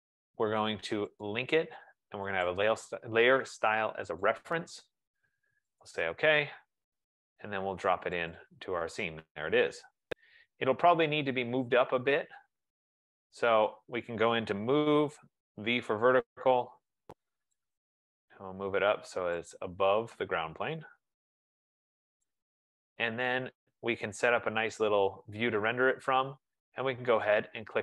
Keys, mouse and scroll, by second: 2.6 click, 4.8 click, 6.0 click, 8.4 click, 9.4-10.7 scroll, 10.9 scroll, 11.7-12.1 scroll, 13.0 scroll, 14.6-16.0 typing, 17.8-18.5 typing, 17.9 click, 19.6 click, 22.4 right click, 22.7 middle click, 22.8 middle click, 23.4-23.7 scroll down 1, 23.7-24.1 scroll down 1.